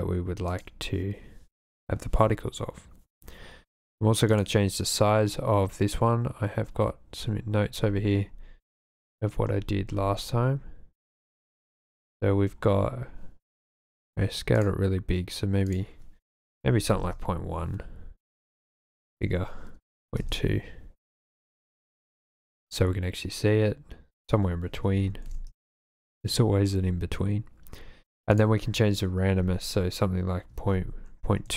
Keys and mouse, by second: 4.3-14.6 drag, 15.6-17.1 drag, 18.5-20.3 drag, 24.2-25.6 drag, 28.4-31.5 drag.